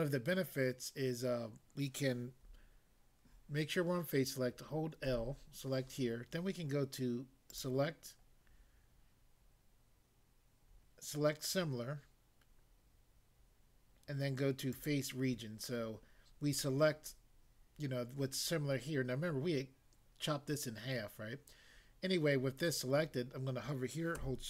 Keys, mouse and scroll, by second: 5.1 l, 7.5 click, 14.7 click.